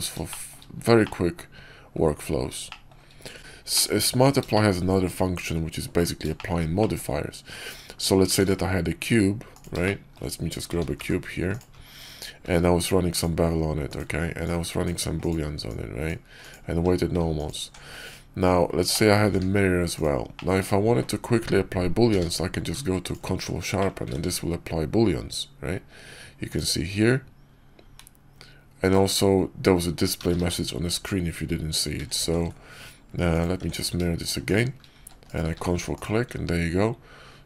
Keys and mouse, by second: 0.2 shift+click, 0.9-1.8 drag, 2.6 shift+drag, 3.6-4.0 drag, 4.4 shift+drag, 6.3 shift+click, 6.7 click, 8.3 shift+a, 9.7-10.1 shift+middle drag, 10.6 g, 12.3 q, 14.3-15.2 drag, 15.6-16.4 drag, 16.6 q, 18.8 alt+click, 19.1 alt+x, 19.8 click, 20.2 drag, 22.0 q, 23.7 click, 24.0 ctrl+`, 30.1 ctrl+z, 30.3 ctrl+z, 33.5 alt+x, 34.4 shift+drag, 35.4 q.